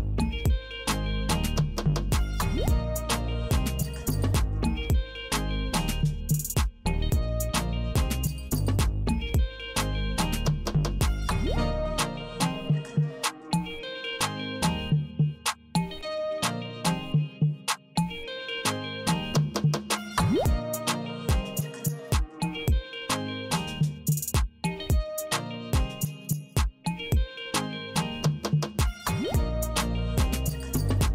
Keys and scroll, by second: 0.5 Right, 2.5 m, 3.8 m, 5.3 Right, 7.3 w, 8.7 w, 9.8 w, 10.8 w, 12.0 w, 12.9 w, 13.9 w, 15.3 w, 16.2 w, 17.3 w, 18.5 w, 19.7 w, 20.6 w, 21.7 w, 22.9 w, 23.7 w, 25.5 w, 27.5 Right, 29.5 c.